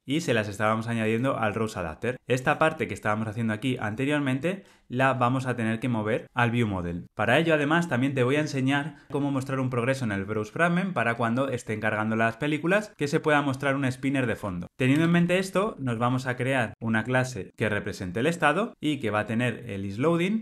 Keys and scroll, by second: 16.6 Return.